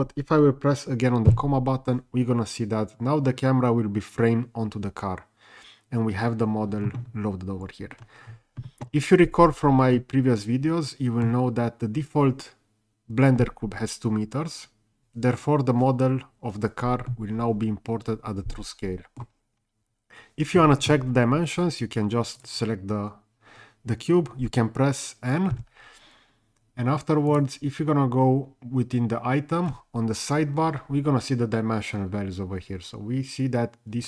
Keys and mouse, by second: 1.3 KP_Decimal, 9.9-11.2 middle drag, 17.1-19.2 middle drag, 22.3 click.